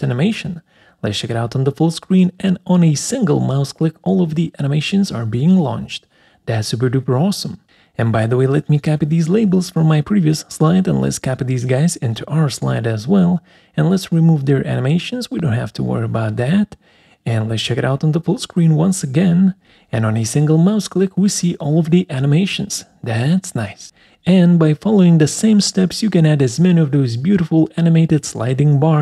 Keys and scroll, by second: 4.4 Escape, 9.5 ctrl+c, 11.2 ctrl+v, 14.8 Delete.